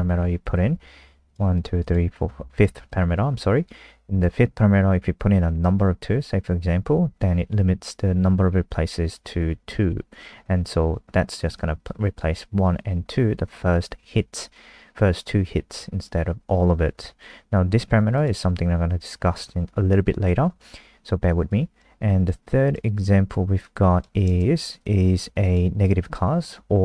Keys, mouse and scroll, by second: 1.5 click, 1.8 click, 2.8 click, 24.8 click.